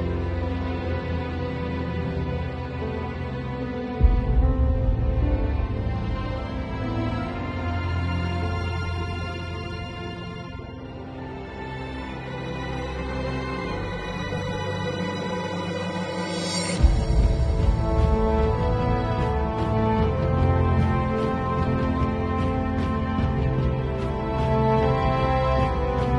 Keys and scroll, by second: 0.6 space, 2.8 space, 3.4 space, 3.9 space, 5.0 [, 5.5 super+[, 5.6 super+z, 5.9 super+[, 7.1 ], 7.8 space, 9.0 [, 10.5 space, 11.8 ], 12.5 [, 13.6-18.4 typing, 19.7-23.8 typing, 25.0 [, 25.7 ].